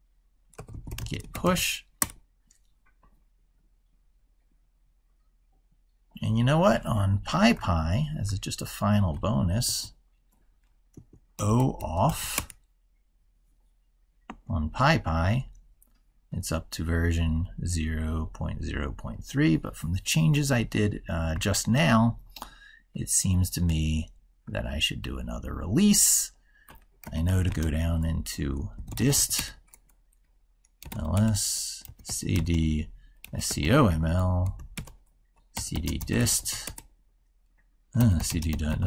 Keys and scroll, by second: 7.4 ctrl+super+Left, 9.4 ctrl+t, 23.5 ctrl+super+Right.